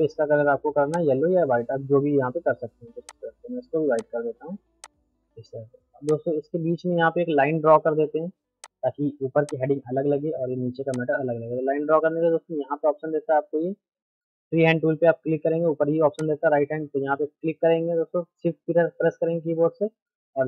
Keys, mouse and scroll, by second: 0.9 click, 1.4 middle click, 2.2 F3, 2.6 middle click, 3.1 click, 6.9 shift+F2, 7.6 middle click, 8.6 click, 10.9 ctrl+click, 12.0 ctrl+z, 16.2 click.